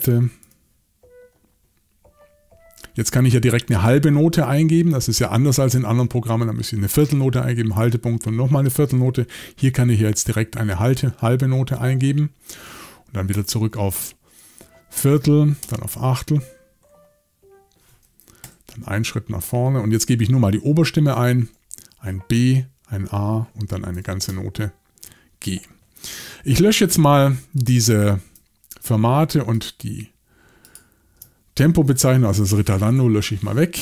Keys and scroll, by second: 0.4 5, 10.1 7, 13.3 6, 15.6 5, 18.4 Right, 21.3 6, 23.9 8, 26.1 Escape, 32.9 BackSpace.